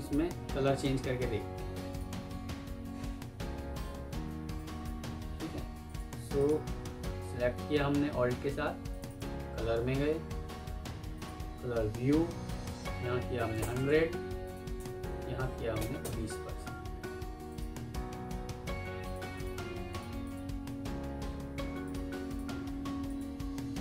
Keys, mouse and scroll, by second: 3.3 F3, 4.8 Escape, 6.3 alt+click, 9.0 double click, 13.3-13.7 typing, 14.3 Tab, 14.7 Tab, 15.4-15.9 typing, 19.3 double click, 22.2 double click, 23.0 alt+click.